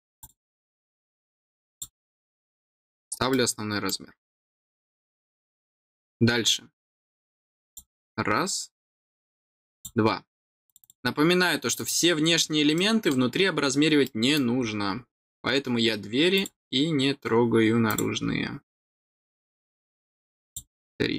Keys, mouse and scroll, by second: 0.0 click, 0.1 click, 1.6 click, 3.2 middle click, 5.0 scroll down 1, 7.6 click, 9.6 click, 10.6 click, 11.7 click, 12.7 middle click, 13.7 scroll down 1, 13.9 middle click, 14.5 scroll down 1, 16.3 click, 17.8 click, 18.7 middle click, 19.3 typing, 20.4 click.